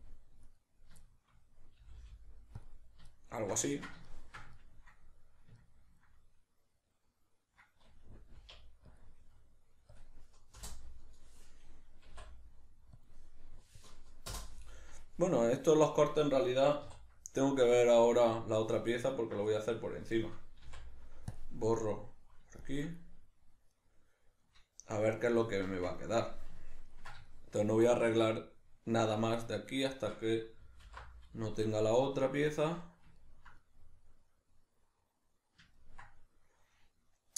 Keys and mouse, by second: 0.1 click, 0.5 right click, 1.1-2.7 shift+middle drag, 1.8 g, 2.7 click, 3.1-19.0 shift+middle drag, 8.4 k, 16.8 3, 18.0 right click, 19.0 ctrl+right click, 19.5-23.7 middle drag, 20.6 x, 23.7 right click, 25.5-37.3 shift+middle drag, 30.9 alt+h.